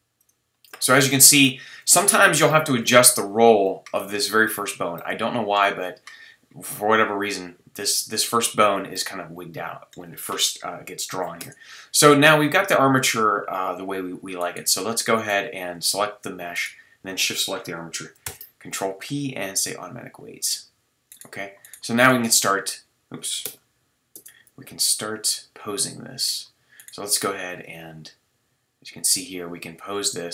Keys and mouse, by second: 10.6 KP_3, 11.4 Tab, 18.2 ctrl+p, 22.1 q, 24.1 Tab, 28.1 middle click, 28.5-28.8 middle drag, 28.8-30.3 drag.